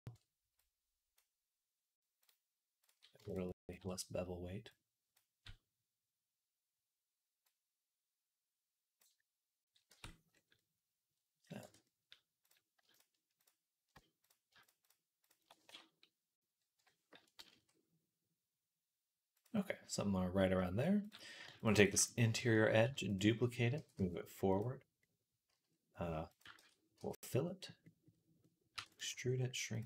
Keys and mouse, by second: 0.4-2.1 drag, 2.1 middle click, 2.6 click, 2.7-4.6 middle drag, 4.6-10.8 drag, 9.7 Tab, 11.1-12.3 drag, 11.5 Tab, 12.3 middle click, 13.2 alt+shift+click, 17.4 s, 19.9-21.4 middle drag, 21.4 alt+shift+click, 21.5 alt+shift+middle click, 21.6 alt+shift+click, 21.8 shift+middle click, 22.2-23.2 shift+middle drag, 22.7 shift+d, 23.6 g, 25.3 s, 26.4 ctrl+z, 26.8 f, 27.7 middle click, 27.9-29.8 middle drag, 28.6 e, 29.0 s.